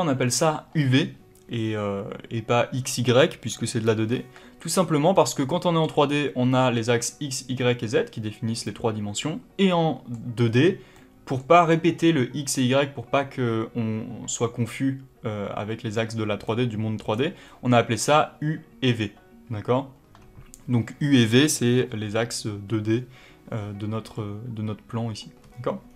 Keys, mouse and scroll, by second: 4.0-5.0 scroll up 2, 9.6 middle click, 10.3-10.8 scroll up 1, 10.8 middle click, 16.3 middle click, 25.3-25.8 scroll up 1, 25.8-25.9 scroll down 1.